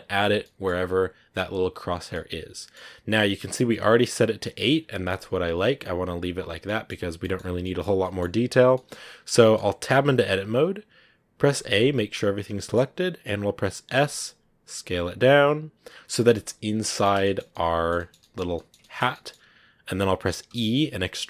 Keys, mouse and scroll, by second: 0.3-1.9 middle drag, 1.9 scroll down 2, 2.0-6.5 middle drag, 6.5 scroll up 1, 6.5 middle click, 7.3 scroll up 2, 7.5-8.6 middle drag, 8.6 scroll up 1, 8.6-9.8 middle drag, 9.8 Tab, 11.4 a, 11.6 a, 12.5-13.9 middle drag, 13.9 s, 16.7-20.4 middle drag, 20.4 e.